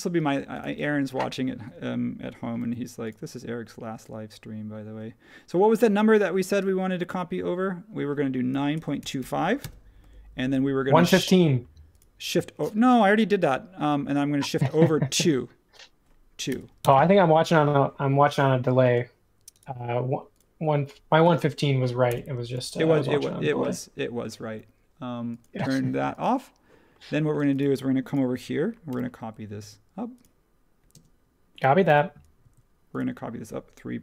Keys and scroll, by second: 0.8 space, 2.6 m, 8.2-10.4 typing, 10.4 super+1, 16.4-16.8 typing, 18.8 space, 22.0 BackSpace, 27.4 space, 28.9 m, 30.9 space, 31.8 m.